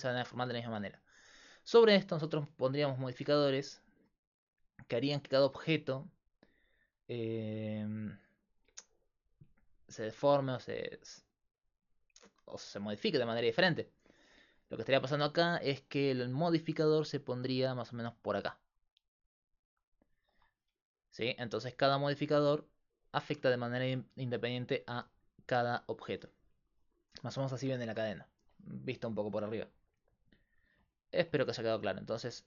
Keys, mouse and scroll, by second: 1.5-3.3 right drag, 4.9-6.5 drag, 9.7-11.6 drag, 12.1-15.0 drag, 15.5-26.2 typing, 17.2-20.2 drag, 23.4-25.8 drag, 30.2-31.8 drag.